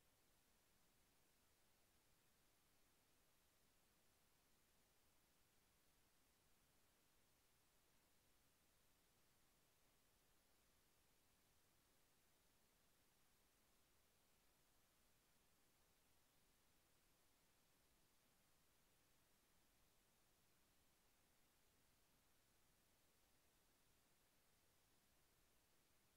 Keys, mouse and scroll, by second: 0.2 g, 1.4 f, 4.8 click, 6.6 click, 8.4 click, 9.6-10.0 scroll up 1, 15.5 click, 17.9 right click, 19.0 click, 20.4 click, 26.1 click.